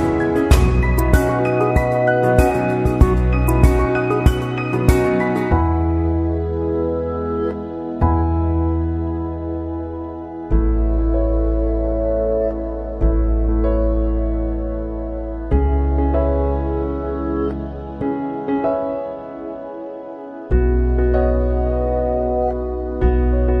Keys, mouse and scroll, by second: 1.1 click, 3.0 click, 4.6 click, 6.0 click, 7.1 click, 8.7 click, 10.3 click, 11.8 click, 13.3 click, 14.1 click, 15.6 click, 17.2 click, 18.7 click, 18.9 typing, 19.4 click, 20.6 click.